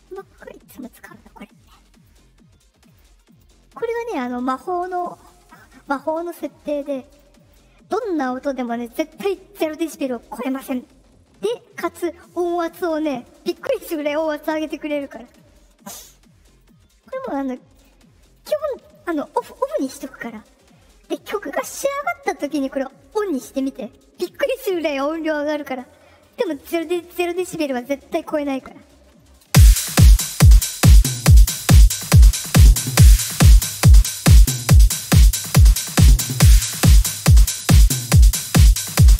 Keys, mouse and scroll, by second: 0.0 click, 1.3 click, 2.8 click, 3.2 click, 3.8 click, 4.1 click, 4.4 click, 4.8 click, 5.1 click, 5.4 click, 5.7 click, 5.9 click, 6.2 click, 6.7 click, 7.0 click, 7.3 click, 16.5 click, 17.7 click, 29.4 space, 34.1-36.8 drag, 37.3 click.